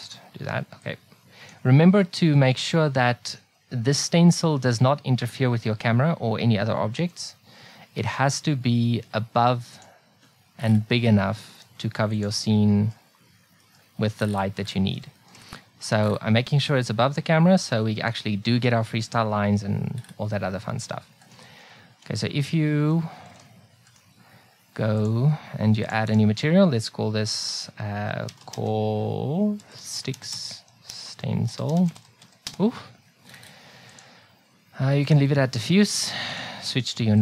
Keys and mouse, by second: 2.0 middle click, 7.9 s, 11.6 s, 21.3-23.0 right drag, 23.9-25.0 right drag, 25.0 middle click, 26.0-28.1 drag, 33.9-37.2 drag.